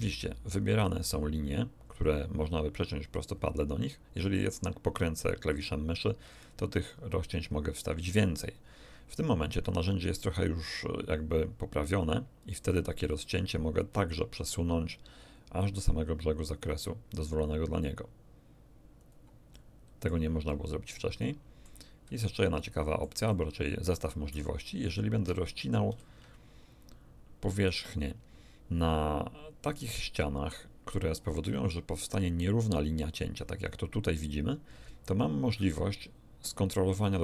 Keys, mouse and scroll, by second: 5.1 scroll up 2, 6.1-6.7 scroll up 2, 6.9-7.4 scroll up 2, 7.6-8.0 scroll down 2, 8.2-8.5 scroll down 2, 9.5 scroll down 2, 13.0 click, 18.9 click, 19.5 middle click, 19.7 click, 20.1 middle click, 20.5 middle click, 20.7 click, 21.3 middle click, 21.5 click, 21.7 middle click, 22.0 a, 22.4 click, 23.4 click, 25.9 ctrl+r.